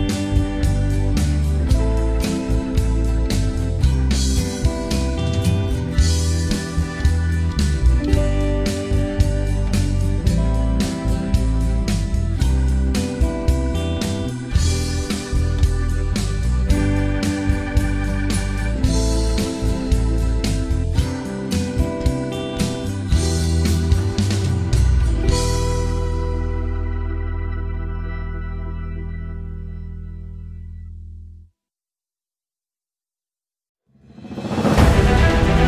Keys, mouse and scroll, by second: 0.1 alt+middle click, 0.4 click, 1.0 alt+middle click, 1.1 alt+click, 1.2 alt+middle click, 1.3 click, 1.7 alt+middle click, 1.8 scroll up 2, 2.0 ctrl+right click, 2.4 alt+middle click, 2.6 click, 2.9 alt+middle click, 3.0 click, 3.4 alt+middle click, 3.7 ctrl+z, 3.8 alt+middle click, 4.0 click, 4.1 alt+middle click, 4.3 alt+click, 4.3 alt+middle click, 4.4 click, 4.7 alt+middle click, 4.7 alt+click, 4.9 alt+middle click, 5.0 ctrl+right click, 5.2 alt+middle click, 5.4 alt+click, 5.4 scroll down 1, 5.5 alt+click, 5.7 alt+middle click, 5.9 click, 6.7 right click, 7.2 alt+click, 7.4 alt+middle click, 7.6 ctrl+right click, 7.9 click, 8.4 alt+middle click, 8.6 alt+click, 9.4 alt+middle click, 9.8 ctrl+right click, 10.2 alt+middle click, 10.3 alt+click, 10.4 alt+middle click, 10.6 ctrl+right click, 10.9 alt+middle click, 11.0 right click, 11.5 alt+middle click, 11.7 click, 12.3 ctrl+z, 12.4 click, 13.0 scroll down 1, 13.1 alt+middle click, 13.3 right click, 13.5 alt+middle click, 13.7 alt+click, 13.9 ctrl+right click, 14.5 alt+middle click, 14.6 shift+right click, 15.2 click, 15.9 alt+middle click, 16.0 alt+click, 16.1 alt+middle click, 16.3 ctrl+right click, 16.5 alt+click, 16.7 alt+middle click, 16.8 click, 17.3 alt+middle click, 17.5 alt+click, 17.7 right click, 18.4 click, 18.5 alt+middle click, 18.6 alt+click, 18.7 alt+middle click, 19.0 alt+click, 19.2 ctrl+right click, 19.4 alt+middle click, 19.7 click, 20.2 alt+middle click, 20.4 click, 20.6 right click, 20.7 alt+click, 20.9 scroll down 3, 20.9 alt+middle click, 21.0 alt+click, 21.3 alt+middle click, 21.4 alt+click, 21.7 alt+middle click, 21.9 alt+click, 22.7 alt+middle click, 22.9 alt+click, 23.2 alt+middle click, 23.3 right click, 23.8-24.3 scroll up 2, 23.9 alt+middle click, 24.3 click, 24.8 ctrl+z, 25.1 alt+click, 25.4 right click, 25.6 scroll down 2, 25.6 alt+middle click, 25.7 alt+click, 26.0 alt+middle click, 26.1 alt+click, 26.9 alt+middle click, 27.0 alt+click, 27.6 Tab, 27.8 alt+middle click, 27.9 alt+click, 28.2-29.6 alt+middle drag, 29.6-30.1 drag, 30.1 alt+middle click, 30.2-35.3 alt+drag.